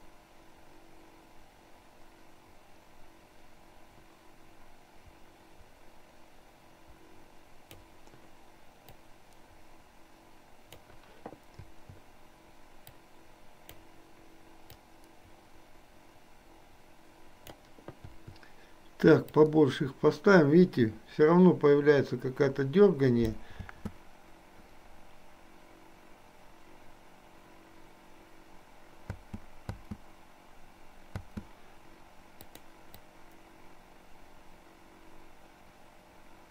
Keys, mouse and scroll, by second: 9.1-10.9 drag, 11.6 i, 13.0 click, 14.9-17.6 drag, 18.3 i, 19.4-23.4 drag, 23.6 space, 29.1 space, 32.5 click, 33.1-36.5 drag.